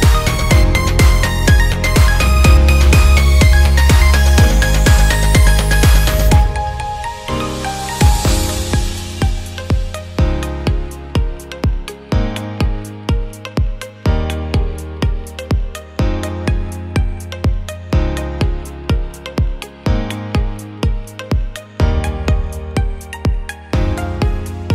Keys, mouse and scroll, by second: 0.5 click, 1.1-4.1 drag, 4.8 click, 6.0 click, 7.0-8.7 right drag, 7.9 click, 8.3 click, 9.1 ctrl+click, 9.7 alt+click, 10.2 ctrl+click, 11.7 ctrl+click, 12.6 alt+click, 13.5 Tab, 14.3 a, 16.1 click, 17.8-20.0 drag, 18.9 KP_3, 22.2 Tab, 23.9 click.